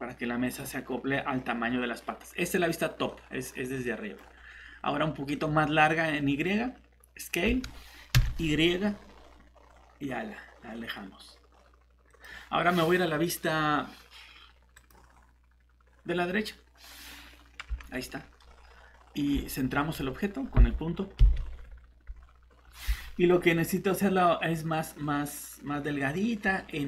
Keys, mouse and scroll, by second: 0.5 click, 3.1 middle click, 7.5 s, 8.1 y, 12.1 click, 18.2-19.3 typing, 18.4 shift+middle click, 19.3 scroll up 1, 22.1-23.5 scroll down 1, 23.5-24.8 scroll up 1.